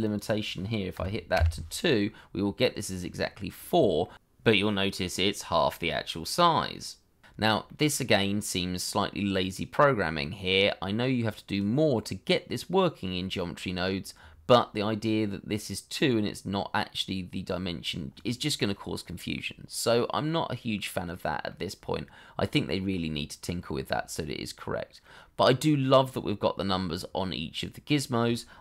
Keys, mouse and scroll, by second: 0.9 2, 1.3 Return, 3.5 scroll down 1, 4.0 shift+middle click, 4.5-6.8 scroll up 1, 6.8 scroll down 1, 7.2 middle click, 19.3 middle click.